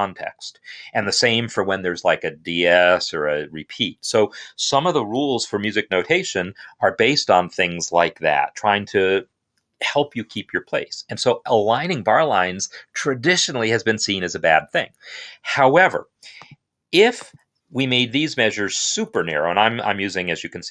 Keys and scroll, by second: 17.7-19.0 typing.